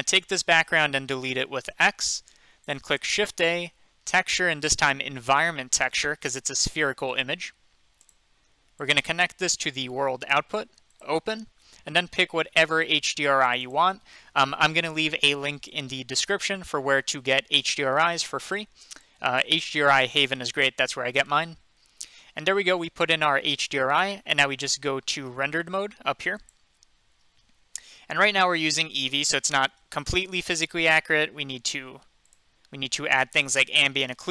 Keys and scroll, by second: 1.7 x, 3.0 a.